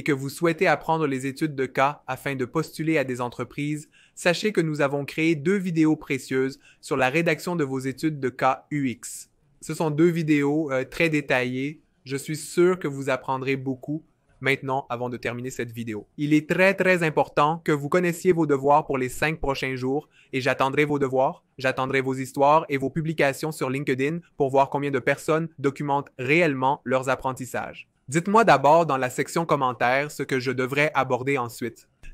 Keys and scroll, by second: 14.0 2.